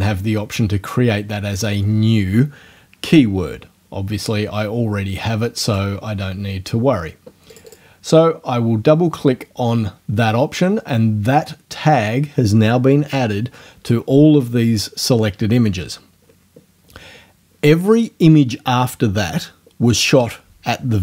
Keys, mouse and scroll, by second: 5.7 click, 7.5 click.